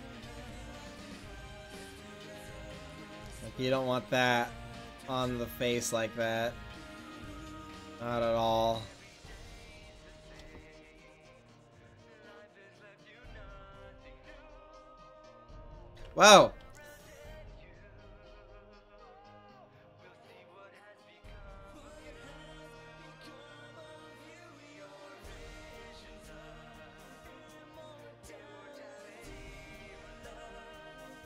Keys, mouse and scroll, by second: 1.2-2.6 right drag, 2.6-4.4 drag, 4.6 middle click, 5.4 click, 8.3 Left, 10.0 right click, 10.1 click, 13.6-15.0 middle drag, 15.0 right click, 18.2 middle drag, 18.5 right click, 20.9-24.1 right drag, 24.3 middle click, 24.5-25.7 middle drag, 28.5 r.